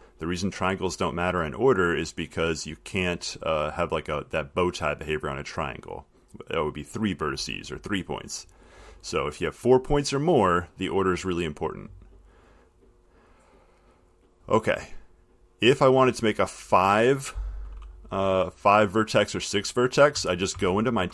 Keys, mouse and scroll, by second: 10.1 click, 14.3 click, 15.4 click, 20.3 Left, 20.8 Left.